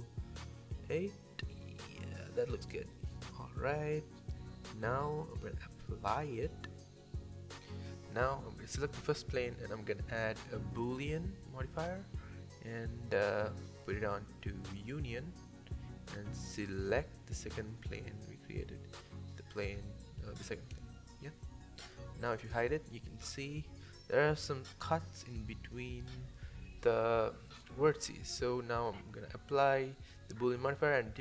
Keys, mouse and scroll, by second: 1.4-2.2 middle drag, 2.2 scroll up 1, 2.5-4.4 middle drag, 4.4-5.2 drag, 5.2-6.2 middle drag, 6.2 scroll up 1, 6.5 scroll down 3, 6.7-7.9 middle drag, 7.9 click, 8.6-10.7 drag, 11.3-12.4 middle drag, 12.4-13.3 scroll up 1, 13.3-14.3 middle drag, 14.3 click, 16.4 click, 17.5 click, 18.1-19.6 drag, 19.6 middle click, 20.4 click, 21.0 drag, 21.3-23.3 middle drag, 23.4 scroll down 1, 23.8-24.8 middle drag, 24.8-26.7 drag, 27.1 click, 27.4-28.7 right drag, 28.7-30.6 middle drag, 30.6 KP_7, 31.0 Tab.